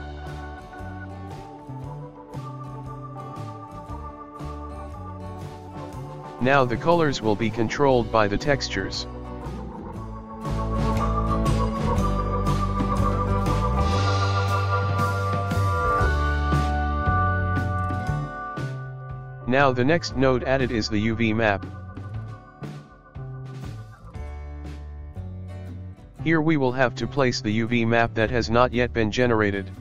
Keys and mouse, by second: 1.4-4.0 drag, 4.0-9.8 ctrl+middle drag, 9.8 shift+a, 22.7-25.3 ctrl+middle drag, 25.3-27.4 drag, 29.0 shift+a.